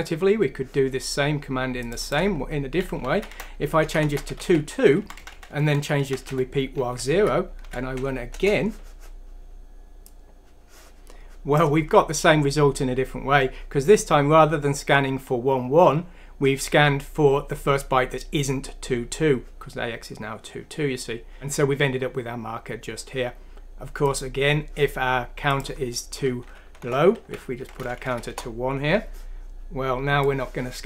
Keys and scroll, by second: 3.2 Tab, 4.2 typing, 4.8 Down, 5.0 Left, 5.2 Left, 5.4 Left, 5.5 Left, 5.7 Left, 6.0 Left, 6.3 Delete, 6.3 typing, 6.8 Up, 7.6 F6, 8.3 Return, 26.8 BackSpace, 27.2 1, 28.1 F6, 28.3 Return, 28.3 typing.